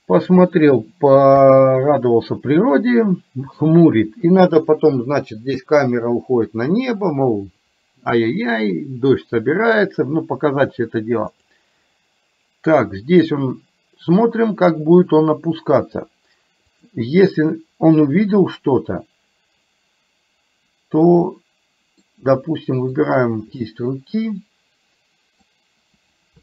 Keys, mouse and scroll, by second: 1.3 KP_3, 11.5 click, 21.2 middle click, 23.0 shift+click, 23.7-25.5 middle drag.